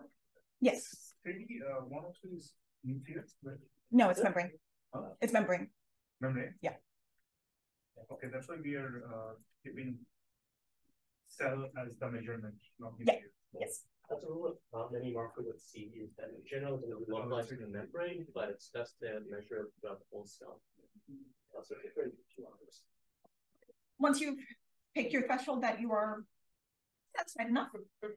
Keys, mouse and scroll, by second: 10.5 click, 11.2 d, 14.1 d, 14.4 d, 14.8-15.6 drag, 15.6-17.2 scroll down 1, 16.0-19.7 typing, 16.1-16.7 drag, 17.2-18.2 scroll up 1, 18.2-18.8 scroll up 1, 18.8-20.5 scroll up 1, 19.1 drag, 20.5 click.